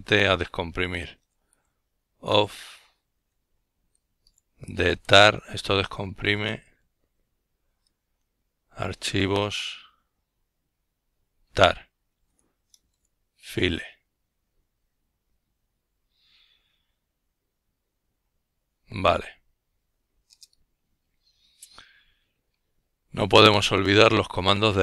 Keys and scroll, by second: 5.9-6.6 typing, 14.0 Return, 21.1-22.6 typing, 24.0-24.8 typing.